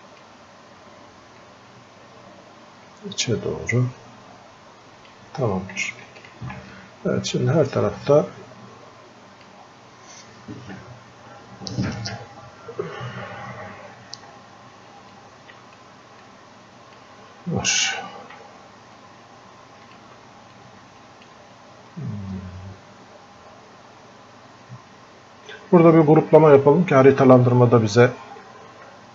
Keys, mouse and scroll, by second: 1.7-5.1 drag, 6.7-12.9 drag, 14.3 scroll up 1, 15.1 click, 16.3-18.3 drag, 18.3 f, 19.0-20.5 drag, 20.5-24.7 drag.